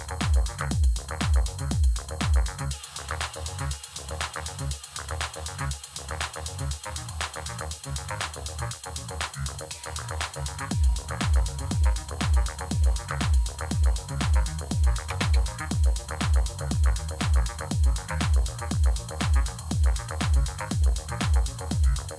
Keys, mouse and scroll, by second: 15.0 space.